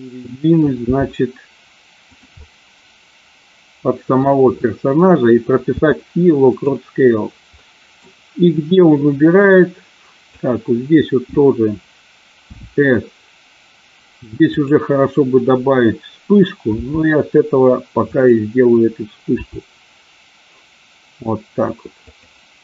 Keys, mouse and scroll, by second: 0.8 g, 2.0 click, 2.4-4.2 middle drag, 5.6 i, 7.5 middle click, 8.8-10.4 drag, 12.5 s, 14.4 click, 16.7 g, 18.1 click, 19.4 r, 22.0 click.